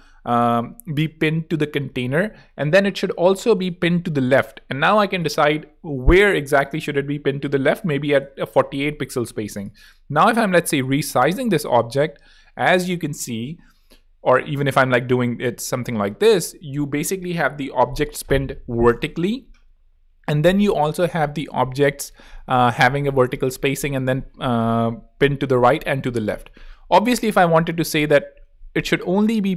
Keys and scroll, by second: 7.5-8.3 typing, 29.1-29.5 typing.